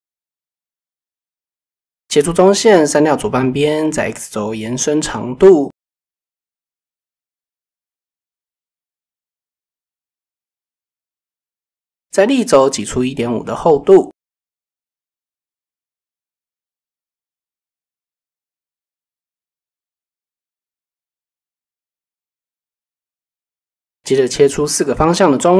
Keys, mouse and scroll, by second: 0.3 click, 0.6 click, 1.3 x, 2.1 shift+click, 2.7 click, 3.6 click, 6.8 shift+click, 8.0 click, 10.0 middle click, 10.2 a, 10.6 middle click, 11.3 e, 11.8 z, 12.0 z, 13.4 click, 14.2-16.2 middle drag, 17.0 middle click, 17.6 KP_7, 18.5 shift+middle click, 23.2 ctrl+r, 24.2 click, 25.1 ctrl+r.